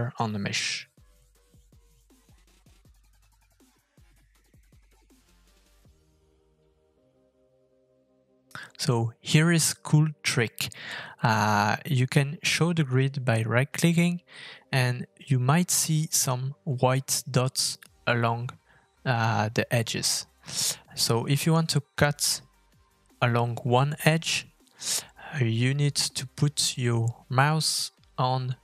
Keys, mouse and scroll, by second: 3.5 middle click, 4.3 middle click, 5.0 shift+middle click, 5.2 middle click, 5.6 shift+middle click, 5.7 middle click, 5.7 scroll down 2, 5.9 middle click, 6.2 shift+middle click, 6.3-6.8 scroll down 2, 6.4 middle click, 7.4 middle click, 7.6 scroll up 2, 7.8 shift+middle click, 8.2 f, 9.4 middle click, 10.4 shift+middle click, 11.8-12.9 scroll up 2.